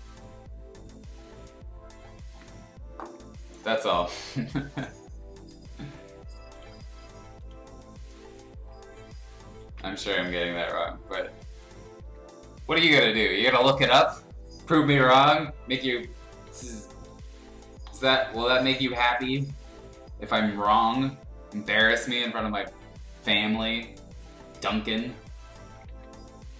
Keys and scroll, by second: 9.6 ctrl+z, 10.3-12.0 typing, 13.8-15.3 typing, 16.5 x, 17.3 ctrl+z, 17.8 x, 20.7 ctrl+z, 25.9 ctrl+z.